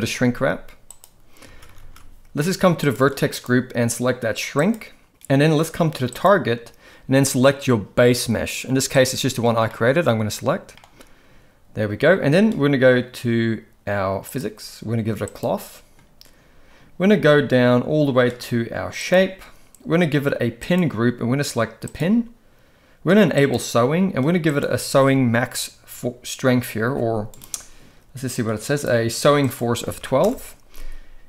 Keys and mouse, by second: 1.4 ctrl+s, 1.7 ctrl+s, 1.8 ctrl+s, 2.8 click, 3.4-4.7 drag, 6.1 click, 9.6-10.8 middle drag, 14.2 click, 15.3 click, 19.0 click, 20.7-22.0 drag, 23.3 click, 24.4-27.4 drag, 28.4 click, 29.4 click.